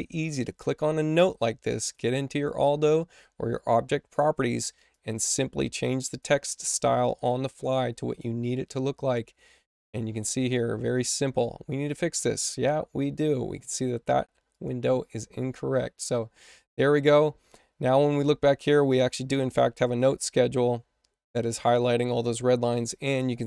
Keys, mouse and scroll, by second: 0.2 click, 1.7 click, 4.7 click, 6.0 click, 14.4 click, 19.8 click.